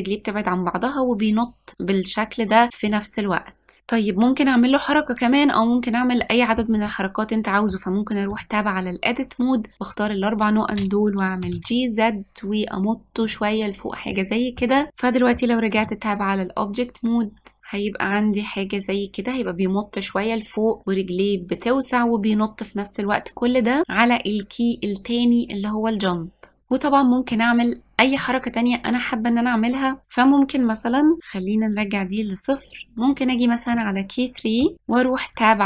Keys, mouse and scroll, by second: 7.0-8.4 middle drag, 8.4 Tab, 9.7 click, 11.5 g, 14.2-15.9 middle drag, 15.9 Tab, 17.6-19.5 drag, 28.3-30.0 middle drag, 31.9-33.3 drag, 33.8-35.6 middle drag.